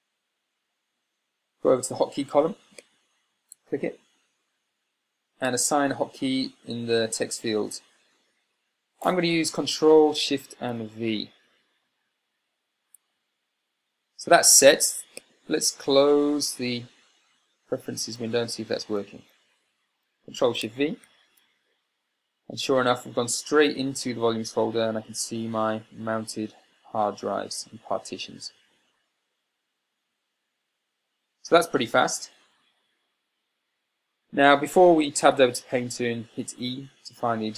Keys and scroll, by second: 19.6 super+w, 35.6 Tab, 37.0 e.